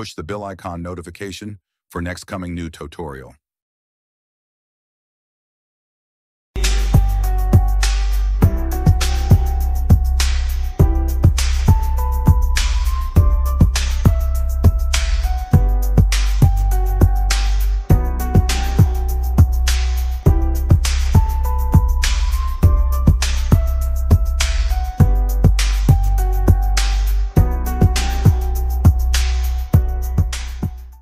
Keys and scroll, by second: 2.6 space, 10.2 1, 11.3 1, 13.4 5, 14.4 7, 15.8 /, 18.4 6, 19.7 ., 20.3 9, 20.7 2, 21.3 Return.